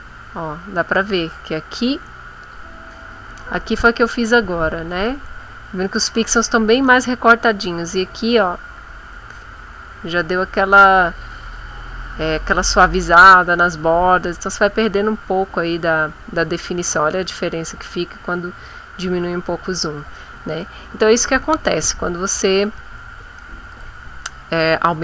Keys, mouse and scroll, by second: 2.4 click, 13.8 ctrl+middle click, 14.9-16.2 ctrl+middle drag, 16.6-17.8 ctrl+middle drag, 22.6 click, 23.7 click.